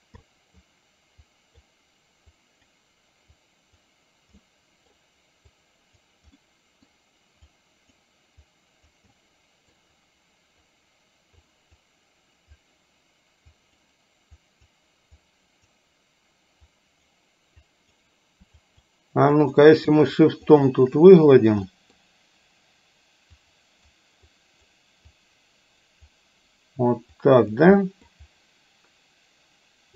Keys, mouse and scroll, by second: 0.2 middle click, 1.2 click, 2.3 click, 3.5 click, 4.3 middle click, 5.6 click, 6.5 middle click, 7.5 click, 8.6 click, 9.1 middle click, 11.6 click, 13.6 click, 14.5 click, 15.2 click, 16.7 click, 17.7 click, 18.7 shift+click, 19.3 shift+click, 20.0 shift+click, 20.5 shift+click, 21.7 middle click, 23.5 click, 24.3 click, 25.3 click, 27.2 click, 27.8 middle click.